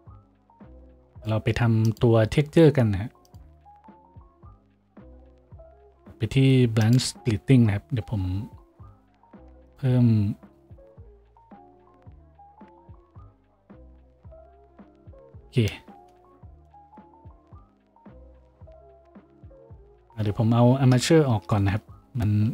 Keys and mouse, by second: 8.2 F6, 16.3 shift+z, 21.9 F6.